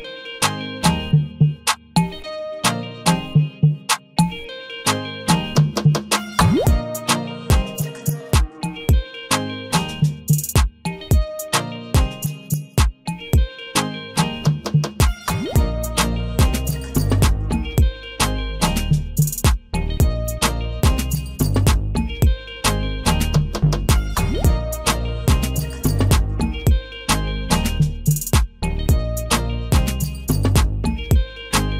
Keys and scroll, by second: 15.0 ctrl+v, 30.7 ctrl+a.